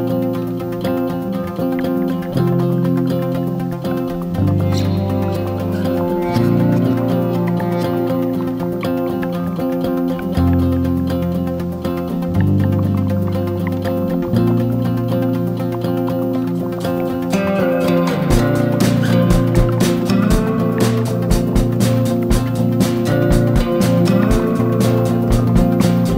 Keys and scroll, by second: 4.1 ctrl+-, 9.0-9.6 BackSpace, 9.7 ctrl+=, 15.1 BackSpace, 15.3 ctrl+-, 16.5 ctrl+=.